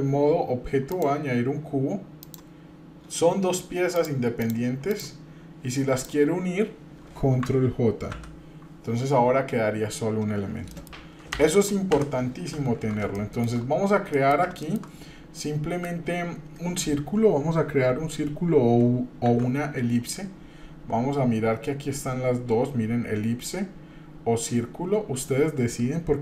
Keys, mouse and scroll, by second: 0.9-2.3 drag, 2.7 scroll down 2, 3.9 click, 4.4 click, 4.9 click, 5.9 shift+click, 6.5 scroll up 1, 8.1 ctrl+j, 10.6 middle click, 11.4 Delete, 11.5 drag, 11.9 Delete, 13.1-13.6 shift+middle drag, 13.6 scroll up 2, 14.1 shift+middle click, 14.6 shift+middle click, 15.0 scroll down 1, 15.4 middle click, 19.2 shift+a.